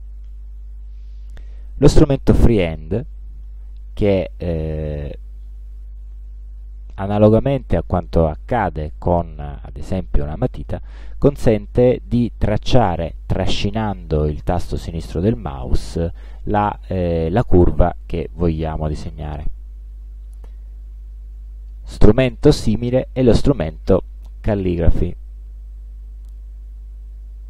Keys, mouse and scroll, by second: 0.7 click, 5.7-8.5 drag, 10.5 click, 20.5-21.6 middle drag, 25.5 click.